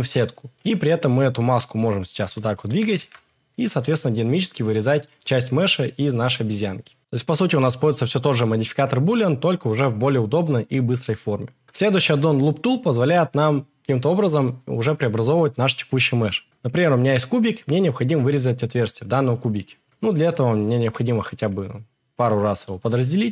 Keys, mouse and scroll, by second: 0.6 g, 2.7 g, 3.0 shift+z, 3.8 click, 21.7-23.3 right drag, 21.7 a.